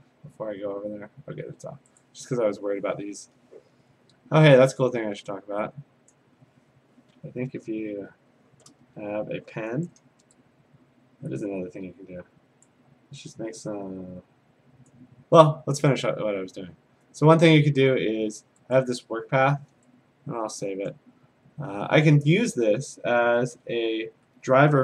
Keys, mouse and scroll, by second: 4.0 middle click, 4.0 scroll, 4.0 scroll, 6.1 click, 7.9 ctrl+z, 9.2 a, 12.6 click, 14.9 click, 17.2 click, 18.8 click, 20.9 click, 23.5 a, 23.8-24.6 scroll.